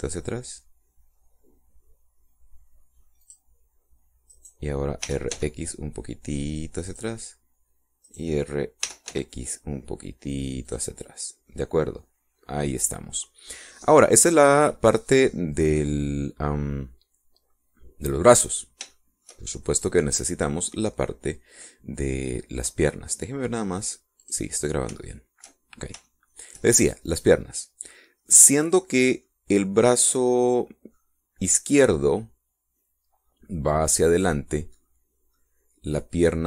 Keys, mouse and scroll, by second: 4.2 click, 5.2 right click, 6.0 r, 6.3 x, 7.8 click, 9.0 right click, 9.8 r, 10.0 x, 11.6 click, 12.4-16.0 middle drag, 16.2-19.4 middle drag, 19.9 shift+middle click, 20.8 middle click, 24.8 click, 26.0 shift+middle click, 26.7 shift+scroll up 2, 27.0 shift+middle click, 29.2-30.4 middle drag, 31.2 middle click, 34.9-35.9 drag, 36.3-36.4 drag.